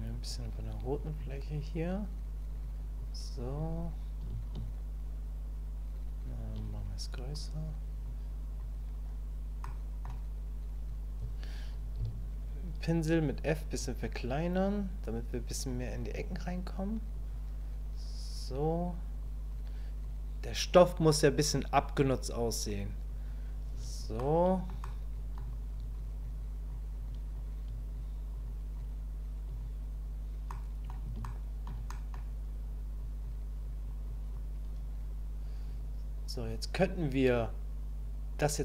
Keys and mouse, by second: 0.9 click, 1.9 click, 3.0 click, 4.5-6.5 shift+drag, 6.5 shift+middle click, 7.1 click, 8.0 click, 9.7 click, 15.0 click, 16.1 click, 17.1 click, 19.2 click, 20.0 click, 21.0 click, 21.8 click, 22.4 click, 23.1 click, 24.2 click, 24.8 click, 26.2 click, 27.1 click, 27.9 click, 28.5 click, 29.4 click, 30.5 middle click, 31.2 shift+middle click, 31.9 middle click, 33.0 click, 33.6 click, 34.1 click, 36.3 click.